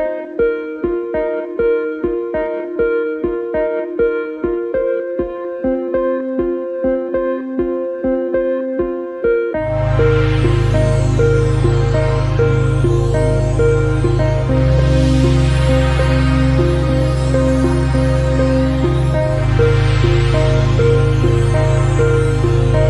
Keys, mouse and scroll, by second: 1.0 middle click, 1.7 ctrl+r, 2.7 middle click, 3.5 ctrl+r, 4.6 scroll down 5, 4.8-8.2 middle drag, 9.0 click, 10.1 Tab, 10.4-11.5 scroll down 1, 11.5-12.3 scroll down 1, 12.7-13.1 middle drag, 13.1 scroll down 1, 13.3-15.6 middle drag, 15.6-16.3 scroll up 2, 16.3 scroll down 2, 16.6-18.8 shift+middle drag, 19.3 KP_3, 21.1 click, 21.8 Tab.